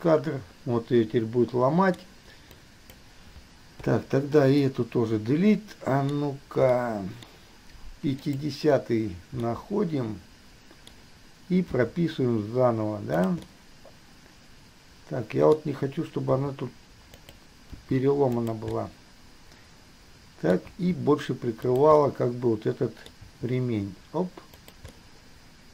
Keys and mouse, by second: 1.3-2.3 middle drag, 2.8-3.2 middle drag, 4.0 Delete, 4.8-6.3 middle drag, 6.9-7.9 middle drag, 8.4 middle click, 9.7-11.9 middle drag, 11.9 g, 13.8-16.5 middle drag, 16.5 r, 17.9 g, 19.0-20.7 middle drag, 21.9 g, 22.3-23.4 middle drag, 24.2 g, 25.2-25.7 middle drag.